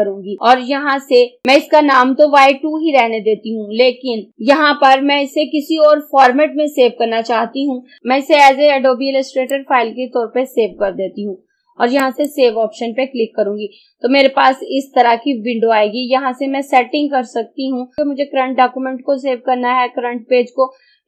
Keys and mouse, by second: 4.3 click, 8.0-12.1 drag.